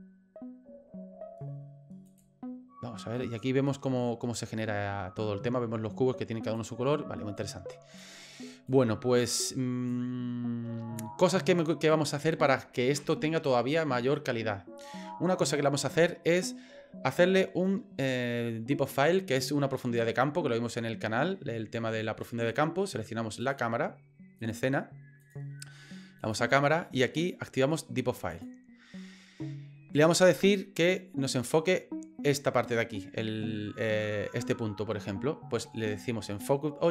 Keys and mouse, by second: 2.1 click, 6.6 click, 7.4 click, 8.7 click, 9.9-11.0 drag, 24.4 click, 28.3 click.